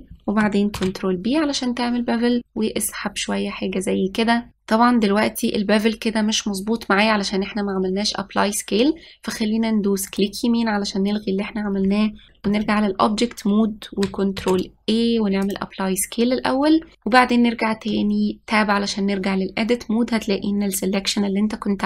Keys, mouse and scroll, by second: 1.4 ctrl+b, 12.3 ctrl+a, 13.1 Tab, 15.1 ctrl+a, 18.6 Tab.